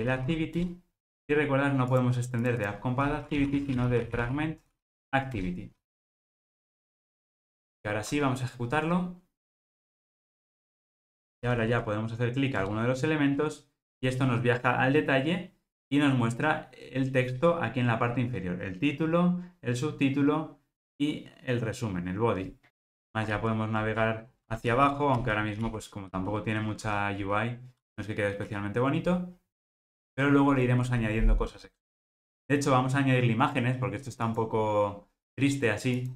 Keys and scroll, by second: 5.4 Return.